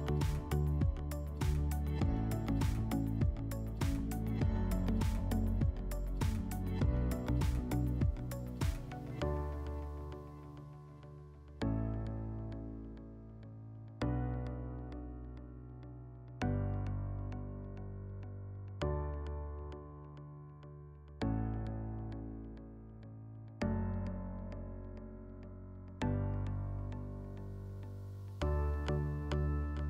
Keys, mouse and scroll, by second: 5.3 click, 7.7 middle click, 19.7 click, 20.9 click, 25.1-26.7 drag, 29.5-29.8 drag.